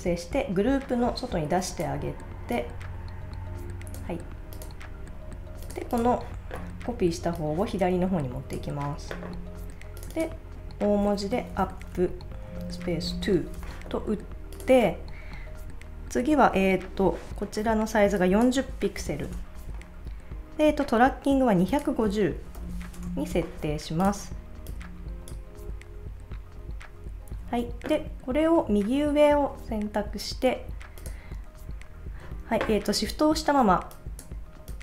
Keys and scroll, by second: 11.3-12.5 typing, 18.7-19.6 typing, 22.1-23.3 typing.